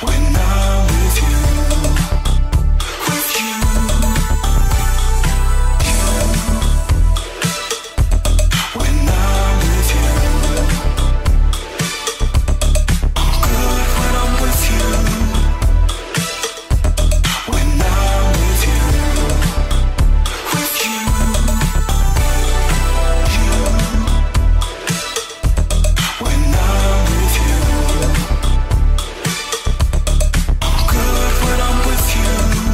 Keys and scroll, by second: 0.5 g, 3.1 ctrl+KP_1, 3.7 ctrl+KP_1, 6.9 ctrl+KP_1, 10.1 g, 13.6 ctrl+KP_1, 16.7 g, 27.6 f, 28.1 ctrl+KP_1, 29.6 ctrl+KP_1, 30.6 ctrl+KP_1.